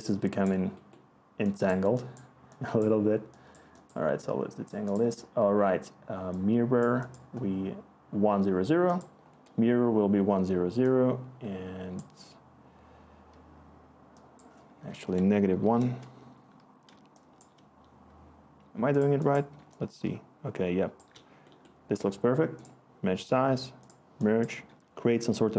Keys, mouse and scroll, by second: 15.0-15.6 typing, 15.8 Return, 16.8 click, 17.3 click, 19.5 click, 20.0 click, 20.1 click.